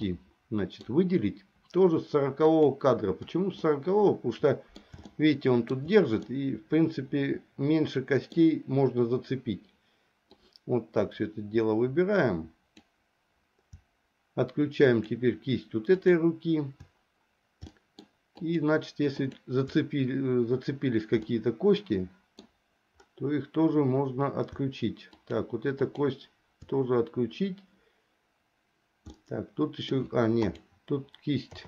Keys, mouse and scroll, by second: 0.2 middle click, 2.6 click, 3.8-5.0 middle drag, 5.3 shift+middle click, 6.4-8.6 middle drag, 10.4-13.0 drag, 15.0 shift+click, 17.8 shift+middle click, 18.6 shift+click, 19.3 shift+click, 21.4-22.5 middle drag, 25.2 shift+click, 26.0 shift+click, 29.3 middle click, 30.6 click.